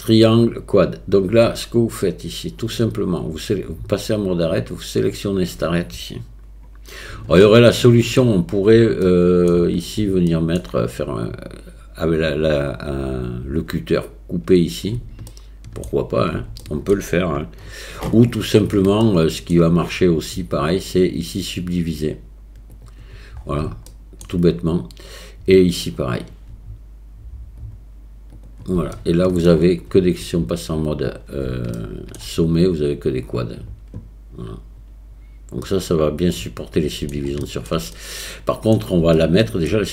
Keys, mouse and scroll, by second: 2.7 click, 5.1 click, 7.4 shift+middle click, 9.1 shift+middle click, 10.3 shift+middle click, 15.4 shift+middle click, 16.6 shift+middle click, 19.0 shift+middle click, 21.6-22.8 right drag, 23.9 shift+middle click, 25.8 click, 27.6 click, 29.0 shift+middle click, 30.8 click, 31.9 shift+middle click, 32.7 click, 33.6-35.2 drag, 35.6-37.0 middle drag, 37.4 shift+middle click, 38.0 scroll up 1, 38.2 middle click, 39.2 shift+middle click.